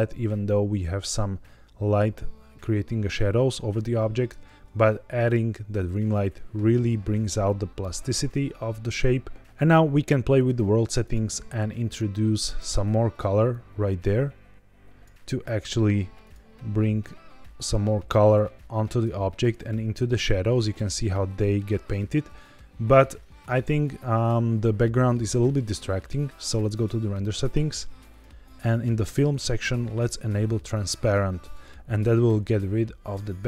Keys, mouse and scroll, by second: 4.2 alt+h, 10.3 click, 10.9 click, 16.1 click, 26.5 click, 27.3-28.0 scroll down 2, 28.0 click, 28.5-29.5 scroll down 3, 30.0 click.